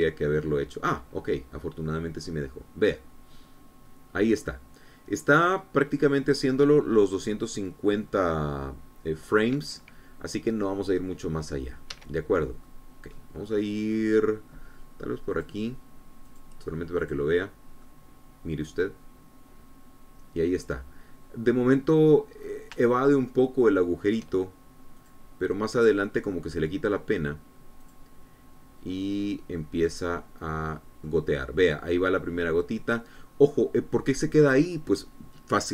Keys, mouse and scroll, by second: 0.6 space, 12.7 Escape, 13.4 middle click, 14.3 middle click, 16.1 click, 17.0 click, 17.8 click, 18.6-23.0 middle drag, 23.2-23.5 scroll up 1, 23.7-25.1 shift+middle drag, 25.7 click, 28.6 click, 30.0-32.0 drag.